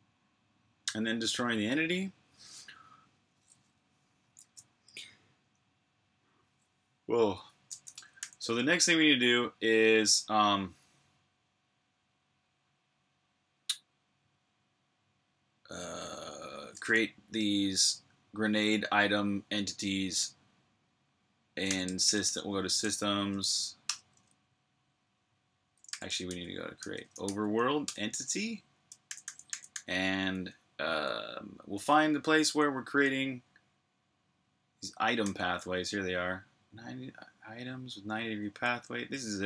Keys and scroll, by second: 8.0 super+j, 21.2-22.6 typing, 22.6 Tab, 23.2 shift+Tab, 23.6 Return, 25.7-31.9 typing, 27.6 Return, 35.0 typing, 38.0-39.4 typing.